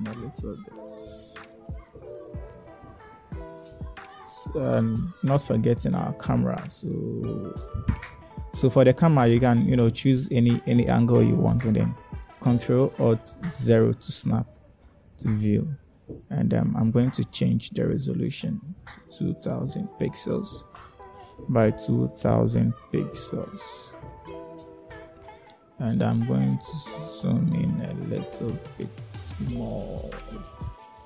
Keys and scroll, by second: 2.8 1, 12.2 1, 14.4 ctrl+alt+0, 19.5 2, 20.5 Return, 22.6 2, 24.3 Return.